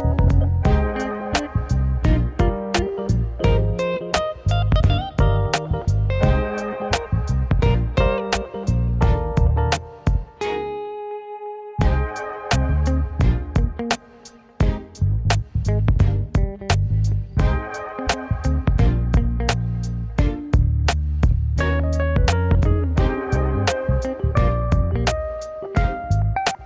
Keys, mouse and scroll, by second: 0.3-1.9 middle drag, 5.4-7.5 middle drag, 7.5-10.9 drag, 10.9-11.2 scroll up 1, 11.2-12.5 middle drag, 12.5 click, 15.2 scroll up 1, 16.6 click, 19.4 ctrl+b, 22.0 click, 22.4 middle click, 22.9-23.3 scroll down 3, 23.3-24.8 middle drag, 24.8-25.1 scroll down 1, 25.1-26.3 middle drag, 26.3 ctrl+s.